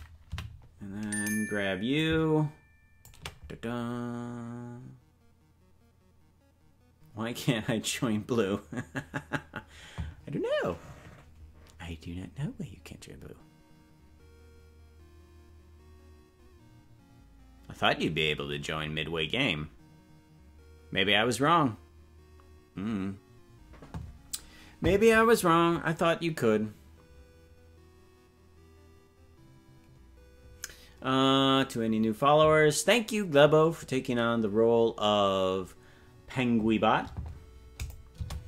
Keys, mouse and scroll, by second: 0.4 Right, 2.0-3.1 drag, 37.8 click, 38.1 space.